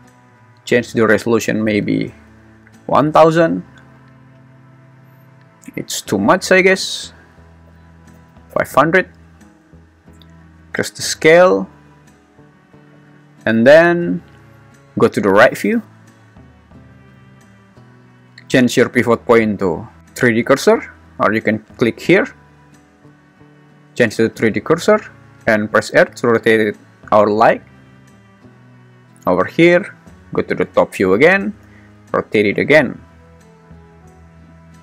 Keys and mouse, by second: 0.5-3.1 drag, 2.3 0, 6.9-8.5 drag, 8.3 0, 9.6 `, 10.4 s, 12.2 click, 14.8 `, 21.6-22.5 drag, 23.7-24.9 drag, 25.9 r, 29.7 `, 31.6 r.